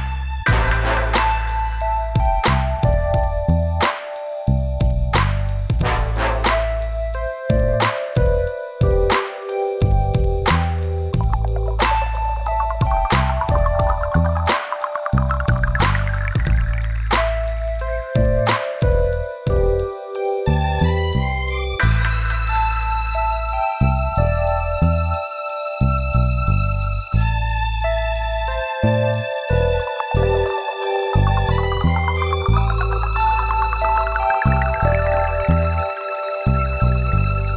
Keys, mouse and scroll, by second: 0.6 click, 0.8 click, 1.3 click, 1.4 click, 1.8 scroll down 2, 2.4 scroll down 1, 2.5 click, 2.6 click, 3.0 scroll down 2, 3.6 scroll up 2, 9.7 shift+Return, 9.8 middle click, 11.0 click, 11.1 click, 11.8 click, 16.4 scroll down 2, 17.3 scroll up 1, 17.8 scroll up 1, 19.7 click, 23.4 scroll down 2, 25.6-26.0 scroll up 2, 28.3 scroll down 2, 30.3 click, 30.4 click, 30.7 click, 31.2 scroll down 2, 32.9 click, 33.1 click, 33.8 click, 34.5 scroll up 1, 36.0 scroll up 1, 36.7 middle click.